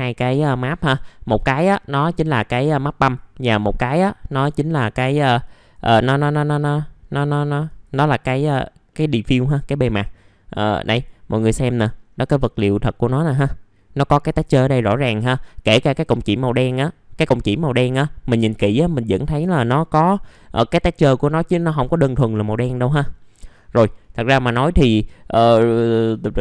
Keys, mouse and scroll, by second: 1.5 middle click.